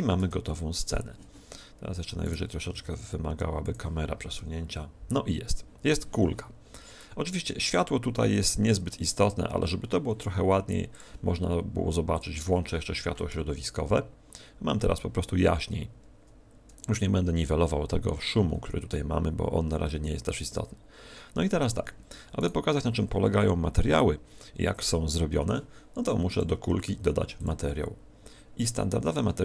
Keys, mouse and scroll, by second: 0.1 KP_0, 2.6 g, 3.6 click, 21.8 Escape, 21.8-22.1 scroll down 4, 22.3 right click, 23.2 z, 26.2 click, 27.3 click.